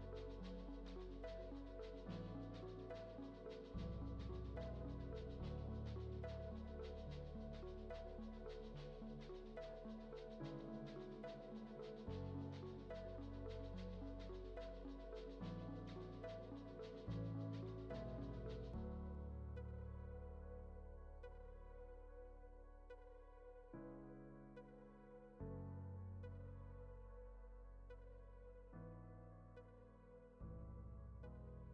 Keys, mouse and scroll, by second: 4.0-4.7 drag, 5.4 click, 5.8 ctrl+c, 6.2 ctrl+v, 7.0-8.7 drag, 10.6 click, 11.0-12.5 drag, 14.0-14.5 middle drag, 15.5-17.6 drag, 18.6-18.9 drag, 20.1-21.9 drag, 24.2-26.1 drag, 28.6-29.7 middle drag, 30.7 shift+a.